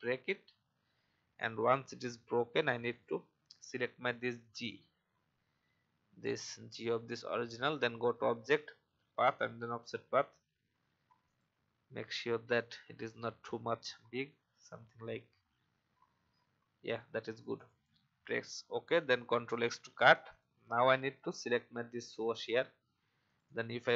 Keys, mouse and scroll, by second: 0.0 click, 1.2-1.9 alt+scroll up 1, 1.9 click, 13.2-14.2 scroll down 1, 15.8-16.2 scroll up 1, 17.5 click, 19.4 ctrl+x, 20.1 click.